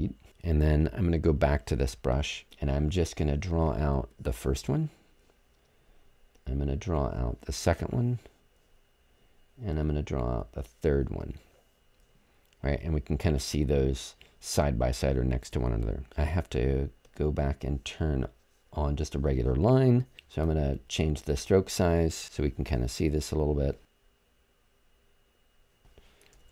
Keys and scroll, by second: 26.3 super+z.